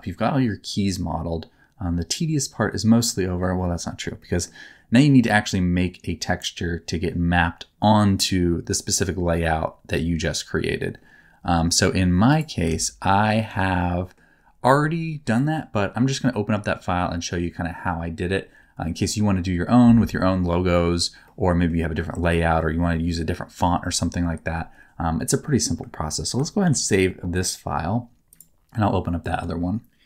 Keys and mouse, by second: 0.0-3.4 middle drag, 4.2 middle click, 12.6 alt+z, 13.0 middle click, 13.4 alt+z, 13.8 middle click, 15.4 middle click, 21.3 middle click, 22.1 middle click, 26.6 ctrl+s, 28.4-30.0 drag.